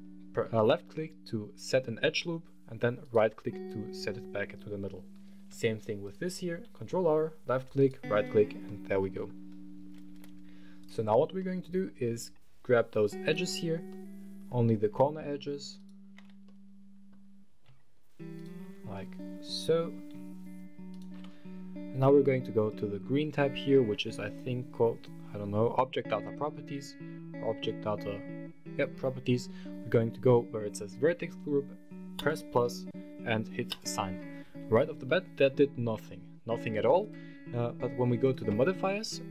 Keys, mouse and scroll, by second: 2.8 right click, 5.2 ctrl+r, 7.5 right click, 8.4 middle click, 10.6 click, 11.1 middle click, 11.4 scroll up 1, 13.0 click, 13.0 right click, 13.6 middle click, 15.5 shift+click, 15.5 shift+right click, 16.2 middle click, 17.0 scroll up 1, 18.1 shift+click, 18.1 shift+right click, 18.7-19.7 middle drag, 20.7 shift+right click, 22.4 click, 31.9 click, 33.4 click, 34.2 Tab, 34.8-35.3 middle drag, 35.3-36.5 scroll down 1, 36.8 click, 38.0-39.3 drag.